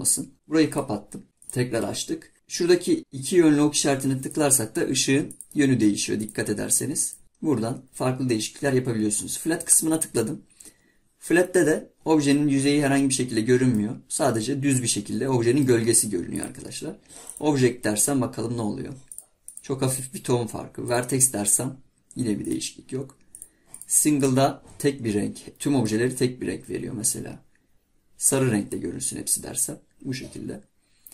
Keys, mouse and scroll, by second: 1.4-2.3 drag, 12.3-12.7 scroll up 1, 12.7-13.0 scroll down 1, 13.0 scroll up 1, 13.3-13.7 scroll down 1, 13.7-16.3 middle drag, 16.3-19.5 drag.